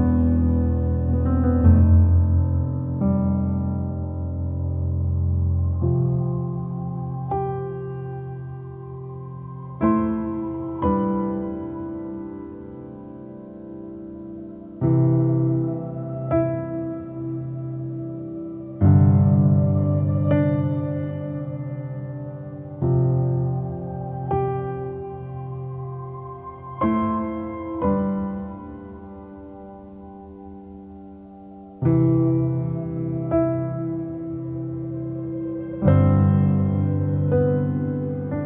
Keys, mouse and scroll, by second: 0.6 click, 0.9 click, 1.0 scroll down 2, 1.3 middle click, 2.1 click, 2.3 shift+d, 3.2 click, 5.4 shift+middle click, 5.6 shift+scroll up 2, 6.0 click, 6.1 middle click, 6.6 shift+click, 7.2 ctrl+l, 7.4 click, 8.2 click, 9.3 shift+middle click, 9.6 shift+scroll up 2, 12.6-13.9 shift+middle drag, 13.9 scroll up 1, 14.3-14.9 scroll down 2, 14.9-20.4 drag, 20.4-21.1 scroll down 2, 21.1-30.6 drag, 30.6-31.2 scroll up 1, 31.2-32.5 shift+drag, 32.5-32.8 scroll up 2, 33.4 click, 33.8 scroll down 1, 34.0 middle click, 34.9 click, 35.1 shift+d, 35.8 click, 36.9 shift+middle click, 37.0-37.6 scroll up 1, 37.6 click, 37.8 middle click, 38.3 shift+click.